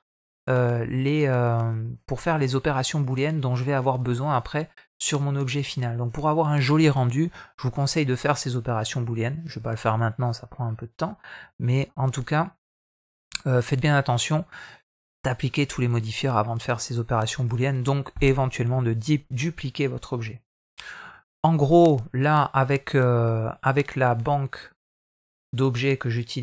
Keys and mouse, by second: 11.3 ctrl+z, 11.9-12.3 middle drag, 12.7 shift+middle drag, 23.5 click.